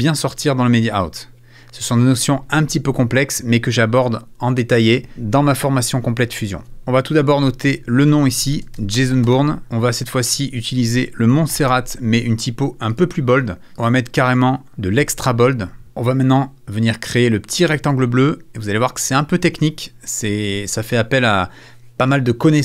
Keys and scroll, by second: 7.8-9.8 typing, 11.1-12.0 typing.